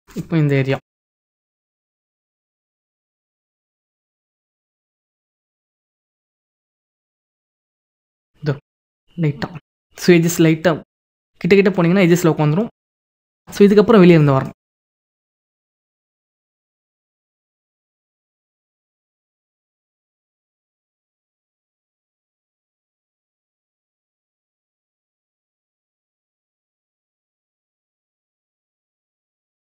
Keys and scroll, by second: 0.6 ctrl+-, 5.6 ctrl+=.